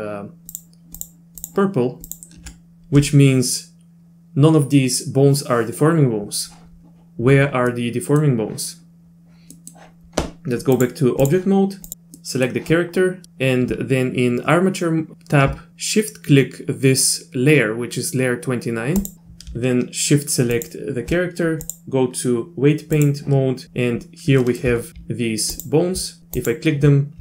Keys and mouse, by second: 1.0 ctrl+click, 1.4 ctrl+click, 7.7 middle click, 9.5 middle click, 10.8 click, 11.9 click, 12.2 middle click, 19.0 shift+click, 21.6-23.1 drag, 24.4 shift+middle click, 25.6 ctrl+click, 26.4 ctrl+click.